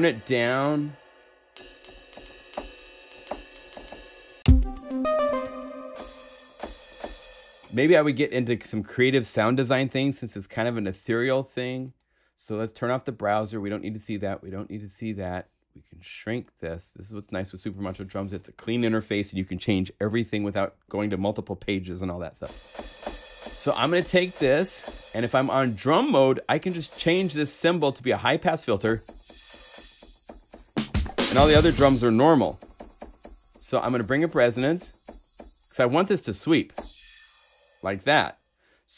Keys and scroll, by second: 4.1 0, 4.3 Return, 5.2 0.